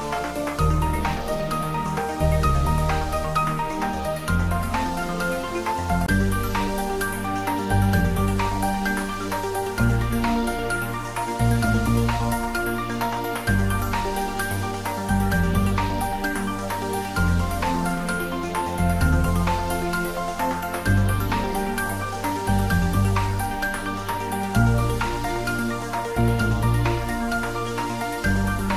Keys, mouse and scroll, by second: 1.7 scroll up 1, 2.0 ctrl+z, 8.9 click, 10.8 right click, 13.5 click, 20.3 click, 27.3 Tab.